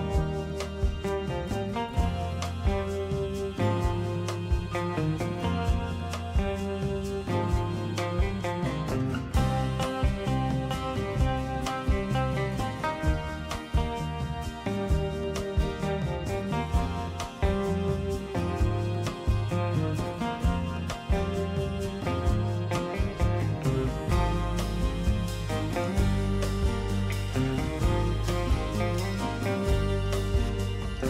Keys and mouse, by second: 0.0 middle click, 0.6 middle click, 2.3 ctrl+click, 3.3-4.5 middle drag, 9.3 click, 10.4 KP_Decimal, 13.7 click, 15.1 g, 20.5-21.9 middle drag, 22.4 alt+z, 23.1 middle click, 24.0 click, 24.4 middle click, 25.3 m, 26.8 alt+z, 27.1 middle click, 28.2 middle click, 29.0 KP_3.